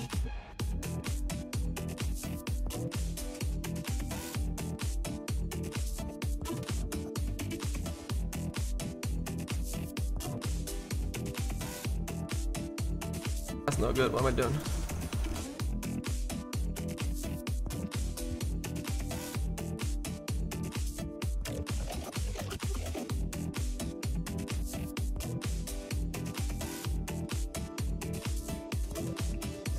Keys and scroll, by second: 21.1 z.